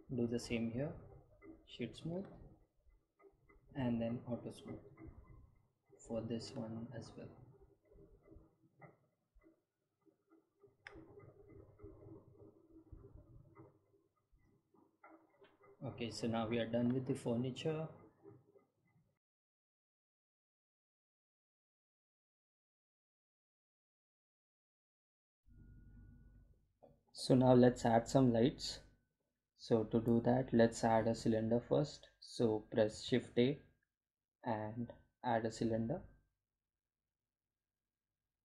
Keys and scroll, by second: 32.5 shift+a, 34.5 shift+a.